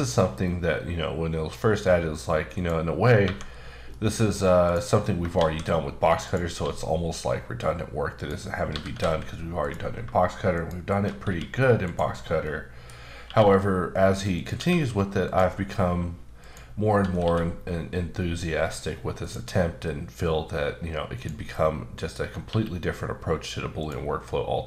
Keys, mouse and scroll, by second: 0.6-1.3 scroll down 1, 1.4-2.1 scroll up 2, 2.5 click, 3.2 1, 3.9 middle click, 4.2-4.6 scroll up 2, 4.6 click, 5.4 shift+a, 6.2 click, 6.6 s, 8.2 click, 8.7 typing, 9.6 click, 10.6 shift+click, 11.2 q, 11.8 click, 12.4 middle click, 14.4 click, 14.5 q, 15.2 click, 15.7-16.4 scroll down 1, 16.4 click, 17.2 q, 19.2 click, 19.8-21.1 scroll down 1, 21.1 click, 21.5 middle click, 22.2 scroll up 2, 22.4 q, 23.8 click.